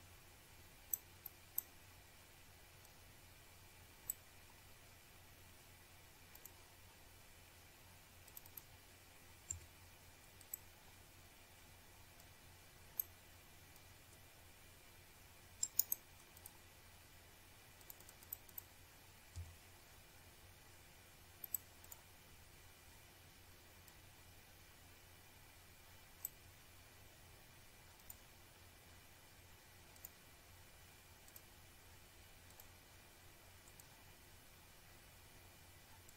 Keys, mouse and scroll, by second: 1.0 shift+right click, 2.1 click, 3.5 click, 5.5 shift+click, 6.3 shift+click, 6.7-7.1 scroll down 1, 7.2 click, 8.8 click, 9.9 click, 11.1 click, 12.6 click, 14.4 scroll down 1, 15.1-15.4 scroll up 1, 16.0 click, 16.4 scroll up 1, 17.8 click, 18.0 click, 19.0 4, 19.9 click, 20.4 scroll down 1, 20.9-21.6 scroll up 1, 21.6 click, 23.1 click, 24.8 shift+right click, 25.5 click, 26.0 scroll up 1, 26.9 click, 27.4 double click, 27.5 click, 28.4 5, 29.3 scroll up 1, 30.4 click, 30.8 click, 31.1 scroll down 1, 31.2 scroll up 1, 32.7 click.